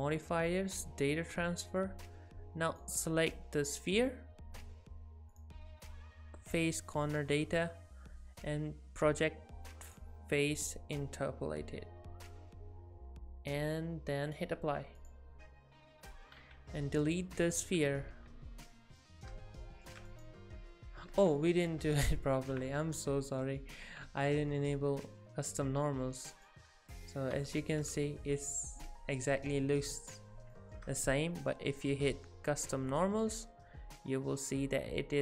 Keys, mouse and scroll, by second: 2.7 click, 5.3 click, 14.3 click, 15.0 click, 16.4 x, 17.8 z, 18.1 alt+a, 18.4-19.0 scroll up 4, 19.0 middle click, 20.1 click, 20.7-21.1 scroll down 4, 21.2 ctrl+z, 21.4 ctrl+z, 21.6 ctrl+z, 22.7 middle click, 26.4 click, 27.3 h, 27.9 click, 28.7 scroll up 1, 30.6 shift+middle click, 32.9 click.